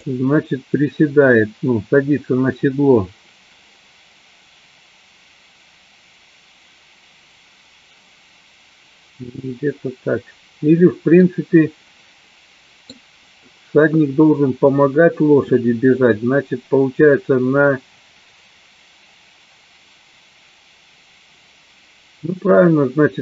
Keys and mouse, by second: 0.5 click, 11.3-13.1 middle drag.